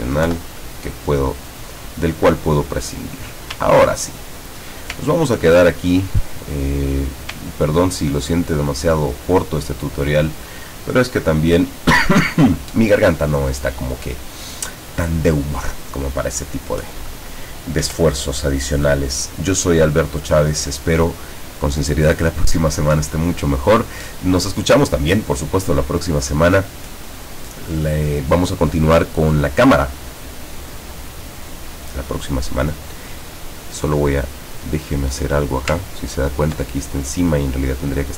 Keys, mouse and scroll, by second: 0.3 Delete, 2.0-3.3 drag, 3.7-4.1 ctrl+scroll down 1, 4.3 ctrl+scroll down 1, 5.1 ctrl+scroll down 2, 6.2 click, 7.5 ctrl+scroll up 2, 8.5 ctrl+click, 33.0 click, 34.2 click, 35.9-36.5 ctrl+scroll up 1, 38.0 click.